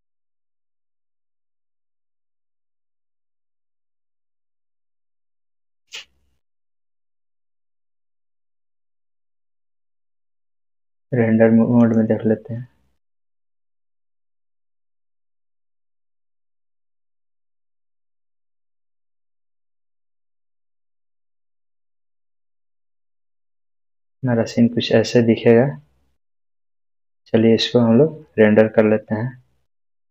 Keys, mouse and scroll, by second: 11.8 click, 19.8 click, 22.5-22.9 scroll up 1.